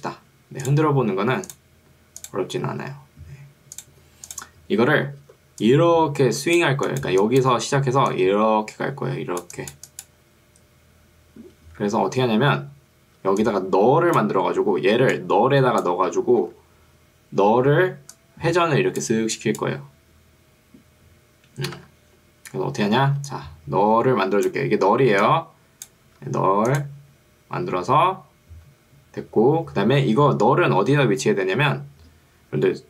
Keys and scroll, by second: 5.3 ctrl+2, 11.9 Escape, 13.3 ctrl+2, 16.5 Escape, 17.7 ctrl+2, 21.9 Escape, 23.1 ctrl+2, 26.1 Escape, 31.1 ctrl+2.